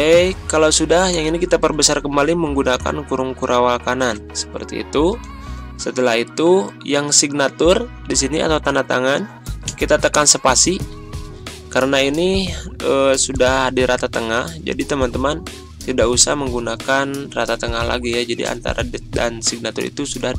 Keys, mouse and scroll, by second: 2.0 ctrl+], 2.7 ctrl+], 5.1 click, 5.8 scroll down 1, 7.1 click, 9.7 space, 20.2 ctrl+scroll down 1.